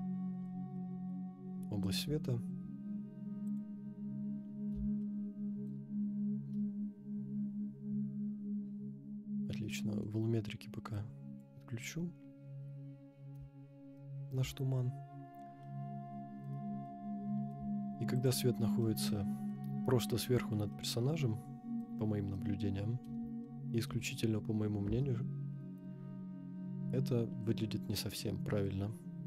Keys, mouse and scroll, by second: 0.7-1.2 middle drag, 1.9 KP_0, 3.4 click, 4.3-4.9 scroll up 3, 5.0-5.7 shift+middle drag, 6.0 scroll up 1, 9.2-10.0 scroll down 3, 9.7-10.0 middle drag, 11.1 click, 12.4 scroll down 2, 13.9 shift+middle click, 15.6-16.5 middle drag, 16.8-17.5 shift+middle drag, 18.1 click, 18.6 scroll up 2, 18.8-19.5 middle drag, 20.3 scroll up 2, 20.7-21.9 middle drag, 22.2 scroll up 2, 22.3-23.0 middle drag, 23.4-23.9 shift+middle drag.